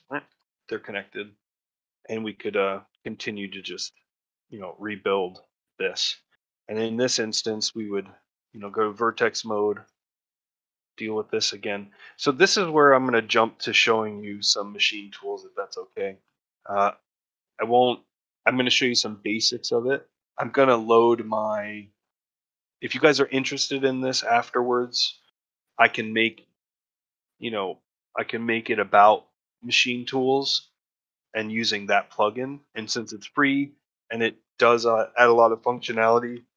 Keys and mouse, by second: 0.5 middle click, 1.0 shift+middle click, 1.3 middle click, 2.8 2, 4.2 f, 4.6 middle click, 5.1 a, 5.9 a, 8.5 1.